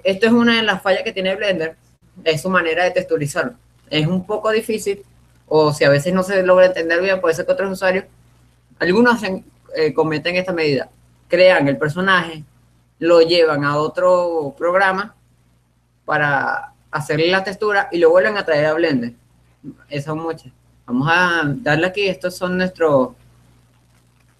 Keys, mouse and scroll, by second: 21.3 click.